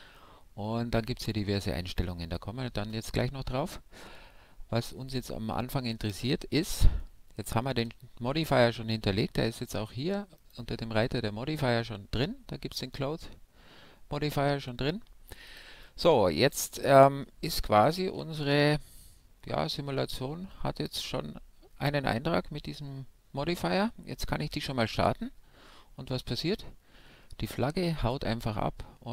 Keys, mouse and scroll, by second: 5.5-9.6 middle drag, 10.4-17.1 drag, 16.7-22.0 middle drag, 24.9 alt+a, 25.9-29.1 middle drag.